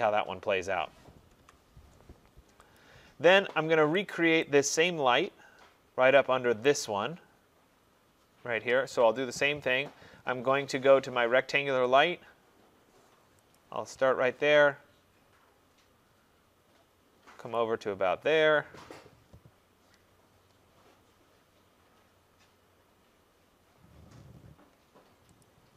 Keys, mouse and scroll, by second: 1.4 Tab, 2.8 click, 4.5 right click, 5.2-5.7 scroll down 2, 5.7-6.2 scroll up 3, 6.7 right click, 7.1 middle click, 7.3 middle click, 7.8 middle click, 12.1 click, 12.4 scroll, 13.6 click, 13.9 scroll, 14.7-15.4 scroll, 15.4-16.5 scroll, 17.6 click, 18.3-18.9 scroll, 19.0 scroll, 25.5 click.